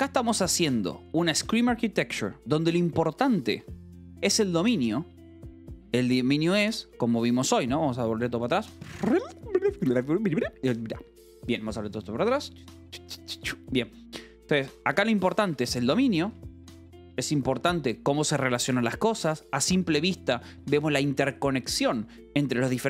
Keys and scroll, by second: 1.2 j, 1.5 j, 3.1 j, 4.2 Escape, 6.1 k, 6.9 u, 13.6 k, 14.4 j, 15.2 k, 16.7 shift+v, 17.5 Escape, 18.4 j, 19.1 shift+v, 19.1 Escape.